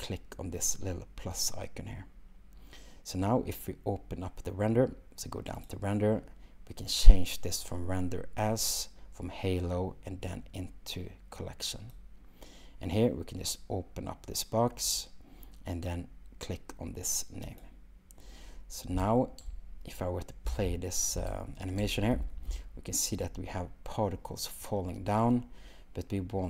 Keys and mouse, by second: 1.5 click, 5.6 click, 8.7-12.0 drag, 15.0-17.7 drag, 20.5 space, 21.8 space.